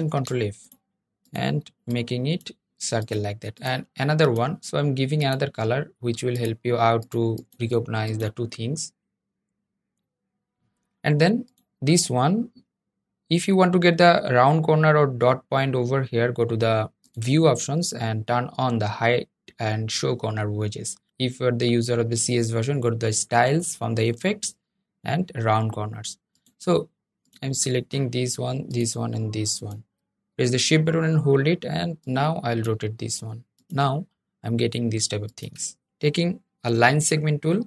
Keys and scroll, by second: 37.2 \.